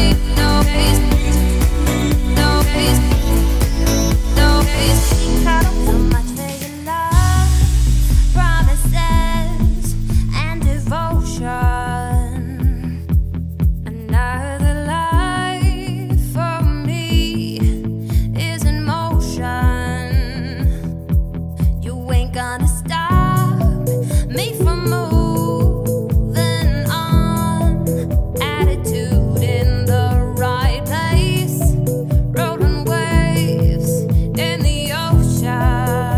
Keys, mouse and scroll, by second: 4.3 click, 4.8 z, 5.6 click, 7.6 click, 9.3-13.9 drag, 16.9 scroll up 3, 17.6 `, 18.5 z, 18.9 click, 19.9-21.4 drag, 21.5 scroll down 5, 21.8 `, 22.6-23.3 scroll down 11, 23.3 shift+middle drag, 23.6 middle click, 23.9-24.7 scroll up 9, 24.8-25.3 shift+middle drag, 25.3 click, 28.5 click, 29.9 click, 30.3 click, 33.3-33.7 drag, 34.0-34.8 scroll down 10, 34.8-35.5 shift+middle drag, 35.5-35.9 scroll up 2, 35.9-36.1 shift+middle drag.